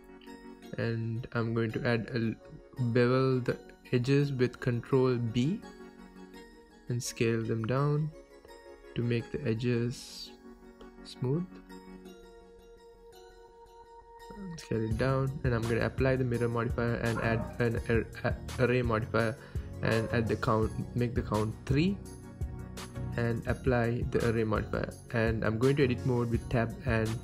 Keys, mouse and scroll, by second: 1.7 click, 2.0 click, 2.5 click, 2.8 Tab, 3.1-4.5 middle drag, 3.3 scroll up 2, 3.6 Tab, 4.0 g, 4.5 click, 4.6 Tab, 4.7-5.1 scroll up 2, 5.1 alt+click, 5.7 ctrl+b, 7.6 click, 7.7 scroll up 1, 8.0-10.9 middle drag, 9.1 s, 10.9 click, 11.0 Tab, 11.2 scroll down 2, 11.4-13.5 shift+middle drag, 11.6-12.1 scroll up 2, 12.1 KP_1, 12.4-12.8 scroll down 2, 12.8 s, 13.5 click, 13.7 g, 14.7 click, 14.8 scroll up 1, 14.9 scroll down 2, 15.1-16.0 shift+middle drag, 15.6-15.9 scroll up 2, 16.0 g, 16.3 middle click, 17.1 click, 17.1 scroll down 1, 17.4-18.7 middle drag, 18.3-18.7 scroll down 2, 18.7 click, 19.2 scroll down 2, 19.3-20.4 middle drag, 19.7 KP_1, 20.0-20.4 scroll up 2, 20.4-22.0 drag, 22.2-23.5 middle drag, 23.2 KP_1, 23.5-26.1 drag, 27.0-27.2 drag.